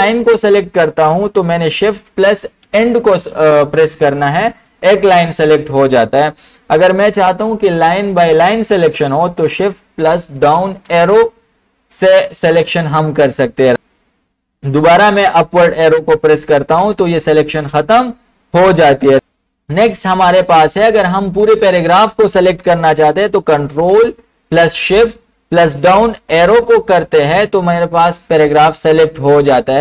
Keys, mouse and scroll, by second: 2.0 shift+Home, 2.7 shift+End, 10.3 shift+Down, 15.6 Up, 16.8 Up, 19.1 ctrl+Home, 22.9 ctrl+Home, 26.3 ctrl+shift+Down.